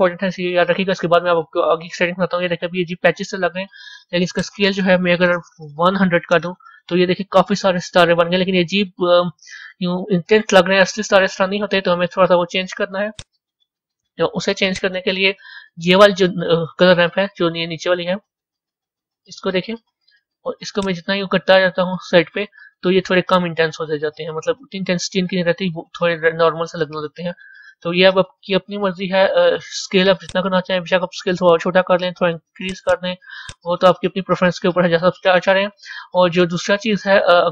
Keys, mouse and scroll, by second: 1.8-6.3 middle drag, 6.3 KP_0, 8.8-13.2 middle drag, 13.2 click, 20.8-23.7 drag, 30.3-33.5 drag, 35.6-37.5 middle drag.